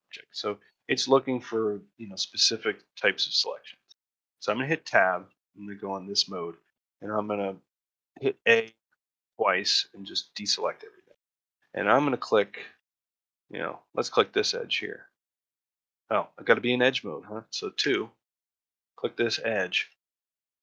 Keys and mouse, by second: 2.6 shift+middle drag, 2.9-3.6 shift+middle drag, 4.7 Tab, 5.2 shift+middle click, 11.2 ctrl+middle click, 12.0 shift+middle click, 12.6 ctrl+middle click, 13.0 shift+middle click, 14.1 click, 14.9 middle click, 17.7 2, 18.4 click, 18.9 middle click, 19.5 shift+middle click, 19.9 ctrl+middle click, 20.2 shift+middle click.